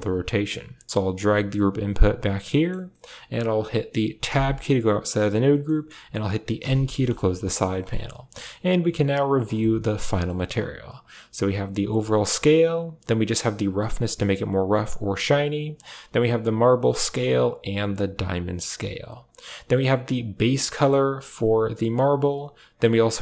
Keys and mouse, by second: 0.9-2.0 drag, 2.4 middle click, 2.9 middle click, 4.1 Tab, 6.4 n, 6.8 middle click, 7.1 a, 7.4 click, 7.8 click, 9.0 click, 9.5 shift+click, 10.0 click, 10.8-12.1 drag, 12.5-14.8 drag, 15.5-16.9 drag, 17.3-18.7 drag, 19.1 click, 20.0 click, 22.6 click.